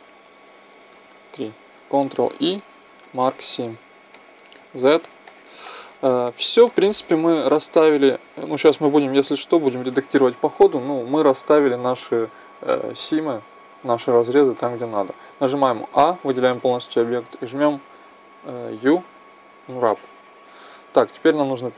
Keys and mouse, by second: 1.2-2.9 right drag, 1.2 click, 2.2 ctrl+e, 4.4 z, 13.9 middle click, 15.3 a, 15.8 a, 18.6 u.